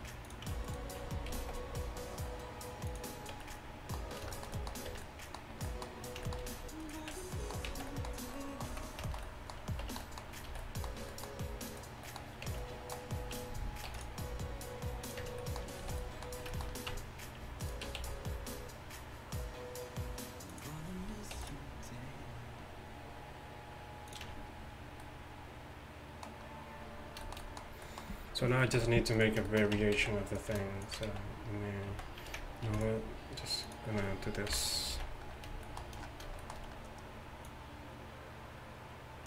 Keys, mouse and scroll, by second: 1.3 g, 3.4 Tab, 4.9 Tab, 6.9-8.1 middle drag, 7.7 z, 8.8 z, 9.9 Tab, 10.5 a, 12.5 Tab, 13.9 ctrl+r, 15.3 Tab, 15.9 a, 16.9 Tab, 18.0 s, 21.4 ctrl+r, 24.3 Tab, 29.2-32.0 right drag, 29.8 Tab, 30.0 z, 30.6-32.0 drag, 31.1 x, 31.9 z, 32.7 ctrl+r, 34.5 KP_1, 35.0 z, 37.5-39.2 drag.